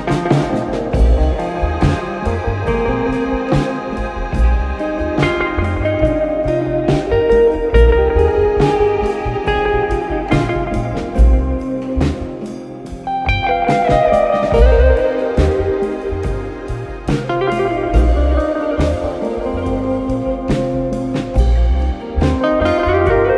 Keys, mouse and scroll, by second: 0.4 b, 5.0 click, 14.5 click, 15.3-16.5 scroll down 1, 16.5-18.2 drag, 18.2 Tab, 19.2 click, 22.2 Tab.